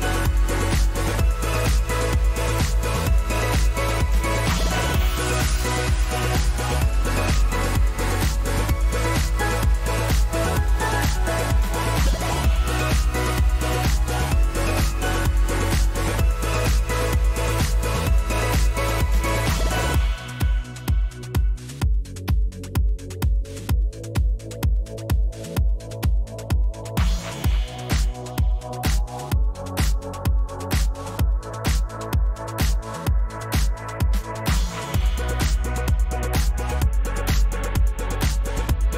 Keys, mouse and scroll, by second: 0.4 click, 0.9-1.2 Right, 1.3-1.9 Down, 2.5 Right, 2.8-3.5 drag, 6.3 click, 8.1 click, 9.2 ctrl+g, 10.0 click, 11.2 click, 12.7 click, 13.8 click, 14.8 shift+click, 16.2-17.2 drag, 18.3-19.3 drag, 20.1-21.1 drag, 22.4 click, 23.1-24.1 scroll down 10, 24.1 click, 25.9 shift+click, 26.8 ctrl+g, 27.5-27.9 drag, 28.7 click, 29.8-30.9 drag, 31.3-32.0 drag, 33.1 click, 35.0 click, 36.9 click, 37.5 ctrl+c.